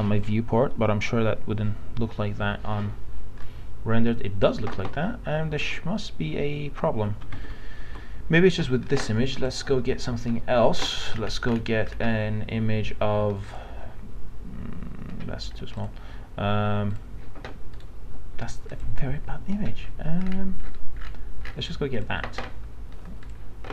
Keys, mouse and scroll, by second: 3.4 click, 4.7 alt+Tab, 5.6 alt+Tab, 6.8 alt+Tab, 7.4 alt+Tab, 9.4 click, 11.1 scroll down 1, 13.4 click, 17.7 right click, 18.7 click, 19.8 scroll up 1, 20.2-20.6 scroll down 1, 20.6 scroll up 1, 21.0 scroll down 1, 21.4 scroll up 1, 22.0 click.